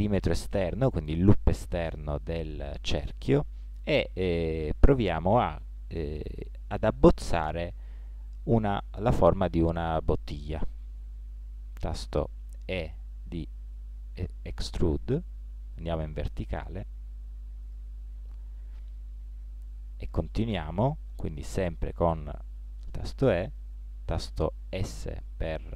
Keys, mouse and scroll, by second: 8.1-12.8 middle drag, 12.8 e, 18.3-20.1 middle drag, 21.9 e, 24.7 s.